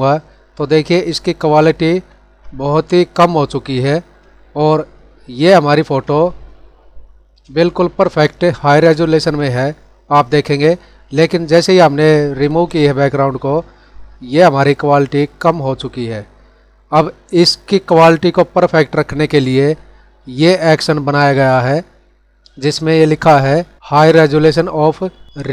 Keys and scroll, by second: 1.6 ctrl+=, 5.4 ctrl+=, 6.2 space, 7.6 ctrl+=, 8.1 space, 9.1 ctrl+-, 14.0 ctrl+-.